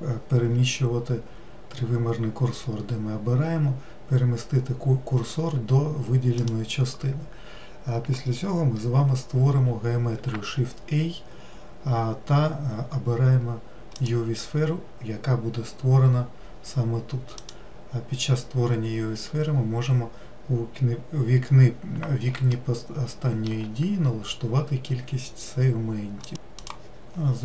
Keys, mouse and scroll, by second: 10.7 shift+a, 17.8-20.8 drag, 22.9-26.0 shift+middle drag.